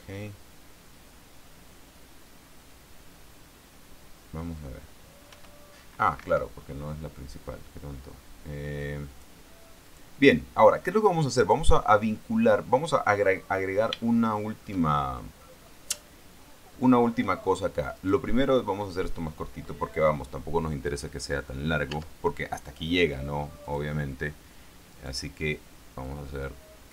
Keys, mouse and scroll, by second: 5.7 p, 6.6 Escape, 9.5 click, 10.2 click, 11.7 right click, 13.4-13.7 scroll down 1, 14.0-14.3 scroll down 2, 14.4 shift+middle click, 15.2 shift+middle click, 15.9-16.4 shift+scroll down 3, 16.4 shift+middle click, 17.8 shift+scroll up 2, 18.3 right click, 18.9-21.2 middle drag, 22.3 Tab, 24.0 click, 25.3 right click, 26.4-26.9 drag.